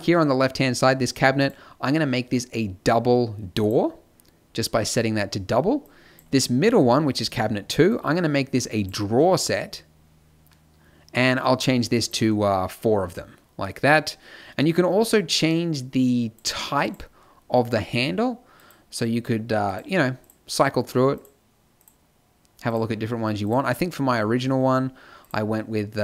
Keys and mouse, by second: 9.7-12.0 middle drag, 12.0-18.7 drag, 19.6-26.0 drag.